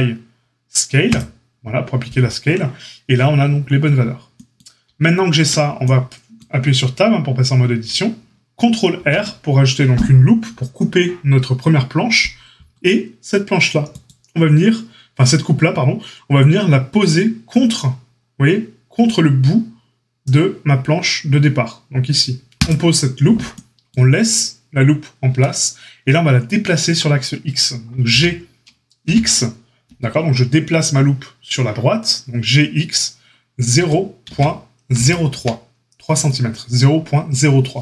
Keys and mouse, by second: 5.3 Tab, 8.9 ctrl+r, 22.6-37.8 middle drag, 28.0 g.